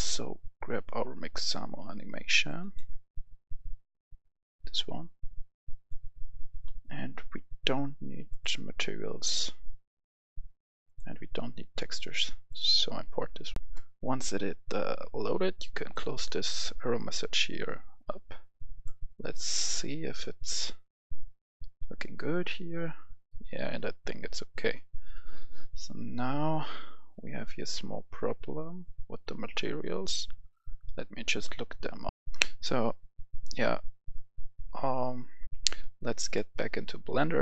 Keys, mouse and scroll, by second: 1.8 scroll down 1, 2.4 click, 3.6 click, 6.6-7.4 scroll down 1, 8.3-9.3 drag, 13.6 F10, 15.8 click, 19.6-21.7 right drag, 19.9-20.8 d, 21.5 d, 22.6-23.7 right drag, 22.6 d, 23.7 d, 24.0 right click, 24.2 d, 27.0-28.6 drag, 29.2 scroll down 1, 32.1 F10, 35.5 F11, 35.5 F10, 36.2-37.4 drag.